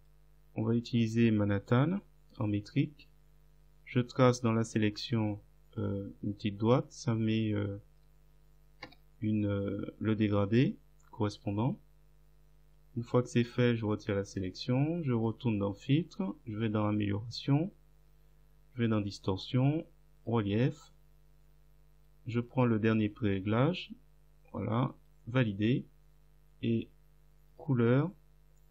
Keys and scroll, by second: 8.9 Return.